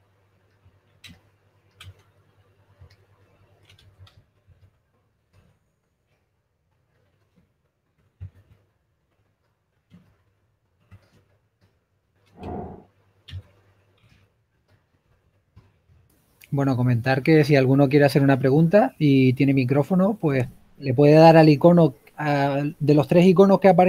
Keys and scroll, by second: 3.7-5.6 typing, 8.6 4, 13.9-14.5 typing, 15.6-17.0 typing, 18.0-18.5 typing, 22.0-23.5 typing.